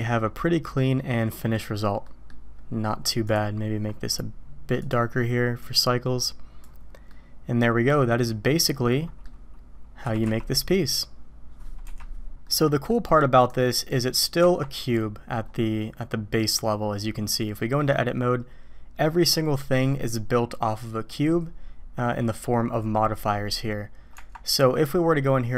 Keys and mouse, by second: 2.0 middle click, 3.3-6.7 middle drag, 7.1-9.3 middle drag, 10.0 r, 13.7-14.1 middle drag, 14.4 Tab, 16.4 click, 17.5 middle click, 24.1 Tab.